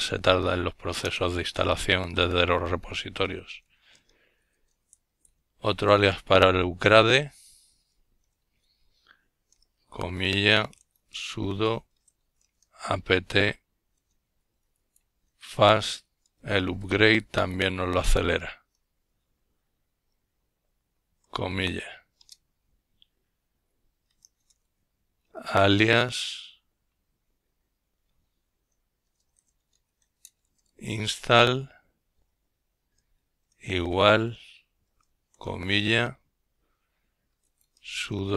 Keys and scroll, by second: 0.0-2.7 typing, 3.7-14.6 typing, 16.5-20.5 typing, 25.3-26.4 typing, 32.6-35.3 typing, 38.0-38.3 typing.